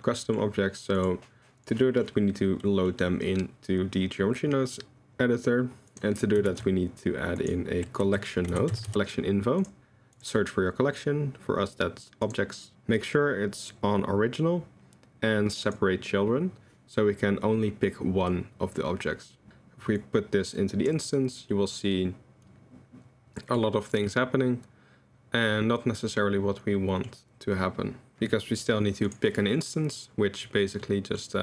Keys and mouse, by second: 0.2 click, 1.0 click, 1.9 click, 2.7 click, 5.9 click, 6.5 shift+a, 8.9 l, 10.3-12.3 drag, 15.6 click, 19.3 click, 20.0-21.2 drag, 21.6-23.6 middle drag, 24.1-27.0 middle drag, 29.1 click, 29.6-30.4 middle drag, 30.8 middle click.